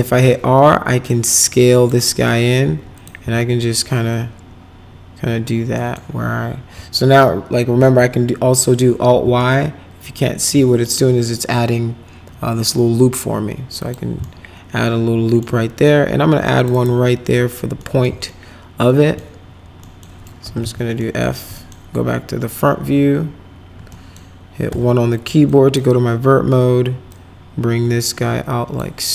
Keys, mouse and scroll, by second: 0.1 r, 1.1 click, 2.1 middle click, 2.9 click, 3.2 w, 4.1-5.4 drag, 5.7 middle click, 7.8 alt+y, 9.4-10.5 alt+middle drag, 13.8 click, 14.2-15.4 alt+middle drag, 16.5 click, 16.7 right click, 17.8 middle click, 18.3 alt+middle click, 19.8 middle click, 20.2-21.1 typing, 21.0 middle click, 21.5 middle click, 23.9 middle click, 24.7 1, 25.5 click, 27.1-28.8 drag.